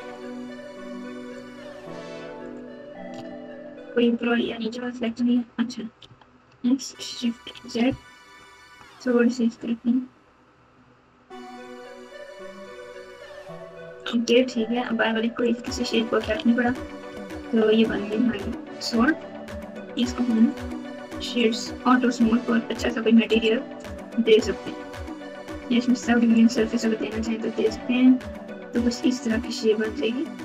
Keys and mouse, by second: 0.1 alt+shift+click, 1.3 alt+shift+click, 6.0 s, 14.8 Tab, 15.4 click, 16.3 alt+z, 17.0 KP_8, 17.2 KP_8, 19.9 click, 20.4 right click, 21.3 right click, 23.3 right click, 26.4 click.